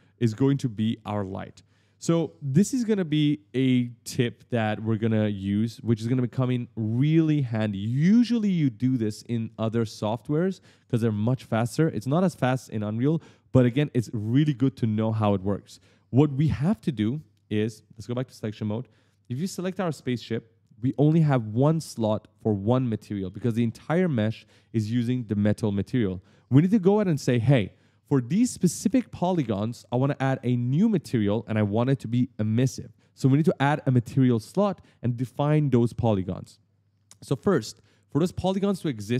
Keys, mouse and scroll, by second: 17.4 click, 17.8 click, 18.4 right click, 19.3 click, 20.3-20.7 scroll up 1, 23.1 right click, 23.2 s, 23.5 right click, 23.6 d, 23.7 right click.